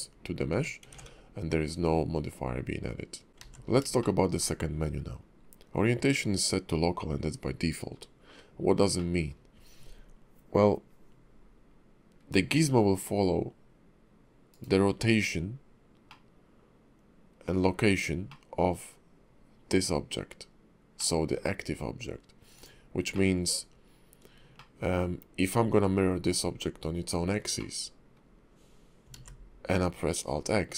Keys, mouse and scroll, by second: 0.5 Tab, 0.9 ctrl+`, 3.3 shift+middle click, 3.4 alt+x, 4.0 shift+middle click, 9.0 middle click, 16.1 middle click, 18.3 middle click, 20.9 middle click, 22.5 click, 23.1 middle click, 24.5 shift+middle click, 27.6 middle click, 29.1 alt+x, 29.7 middle click.